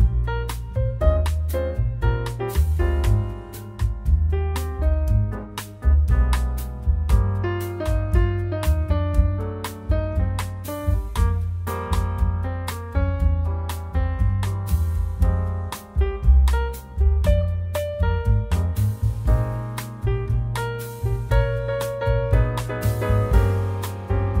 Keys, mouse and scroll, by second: 0.9 click, 2.2 click, 7.5 click, 8.4 click, 9.8 click, 13.8 middle click, 14.4-14.8 scroll up 4, 15.3 middle click, 18.4 click, 20.0-20.6 scroll down 2, 20.6 middle click, 23.3 click.